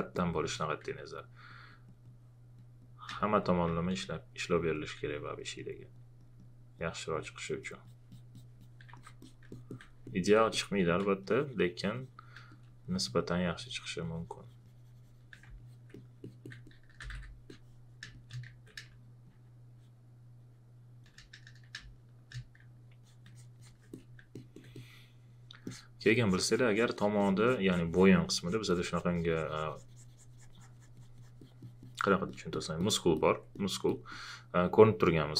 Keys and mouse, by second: 3.1 space, 3.2 click, 3.6 space, 3.7 click, 10.3 alt+click, 12.8 shift+click, 16.2 alt+click, 16.6-19.3 typing, 17.5 click, 18.1 click, 19.3 click, 21.9 click, 23.0 alt+click, 24.3 alt+click, 32.3 alt+click, 33.2 alt+click, 33.9 alt+click.